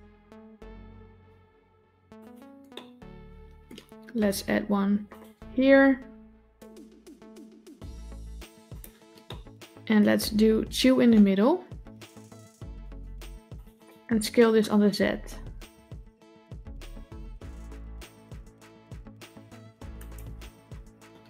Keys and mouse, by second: 2.6 middle click, 4.7 ctrl+r, 9.1 middle click, 12.4 ctrl+r, 15.1 s.